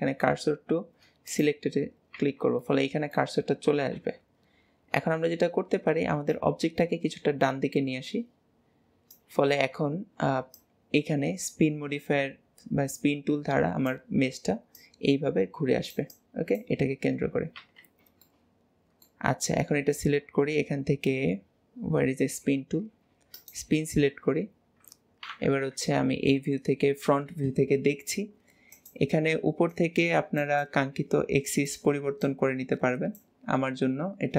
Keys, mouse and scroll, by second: 2.7-4.0 middle drag, 4.0 KP_1, 6.4 click, 18.3-19.4 middle drag, 19.4 Tab, 23.4-25.6 drag, 25.7 KP_1, 28.8 click.